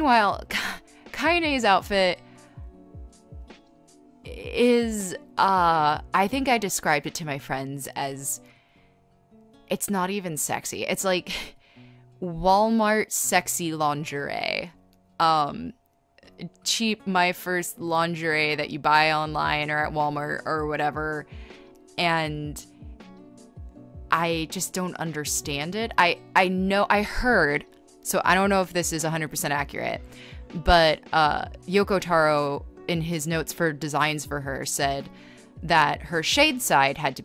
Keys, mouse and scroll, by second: 0.4 scroll, 2.3 scroll, 3.4 scroll, 4.1 scroll, 6.3 ctrl+z, 6.9-7.8 typing, 9.5-12.0 typing, 11.2 scroll, 13.1-14.7 typing, 20.1 space, 21.7-23.1 typing, 30.6 space, 31.9 scroll, 33.5 scroll, 33.7 ctrl+z, 34.0 b, 35.3 scroll, 35.9 scroll.